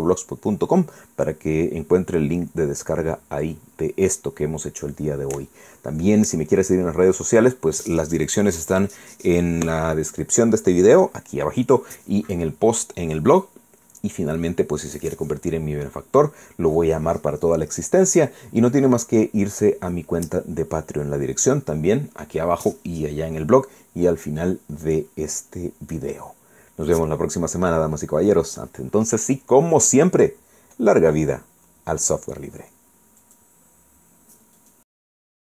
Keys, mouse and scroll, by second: 34.2 click.